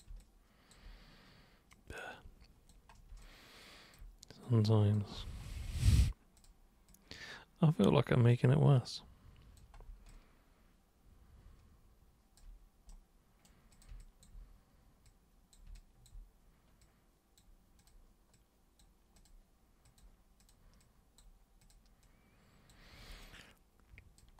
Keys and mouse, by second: 0.2-0.7 alt+super+drag, 1.7-2.7 super+drag, 3.2-3.9 alt+super+drag, 4.4 super+click, 6.4 super+click, 6.9-7.8 super+drag, 8.3 super+click, 10.1-12.4 alt+super+drag, 12.9 super+right click, 13.7 super+click, 14.0 alt+super+click, 15.0 super+click, 15.8 alt+super+click, 16.8 super+click, 17.8 super+click, 18.3 super+click, 19.1 super+click, 19.8 super+click, 20.4 super+click, 20.8 super+click, 21.6 super+click, 22.0 super+click, 23.2 alt+super+click.